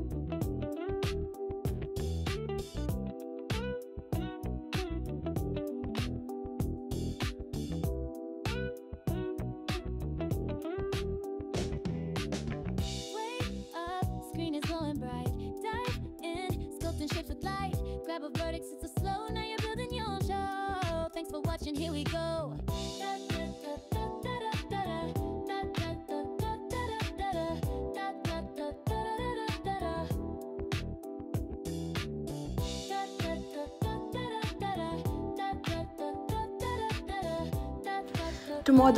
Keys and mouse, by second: 0.6 click, 3.7 click, 4.4 alt+shift+click, 4.8 alt+shift+click, 5.9 click, 7.1 e, 7.5 s, 10.2 click, 12.7 click, 14.2 click, 15.3 g, 18.1 g, 19.6 click, 20.8 g, 22.5 click, 22.9 g, 23.9 click, 24.8 click, 25.3 g, 30.5 click, 31.0 g, 31.8 click, 32.7 click, 33.0 g, 34.5 click, 35.0 g, 35.7 click.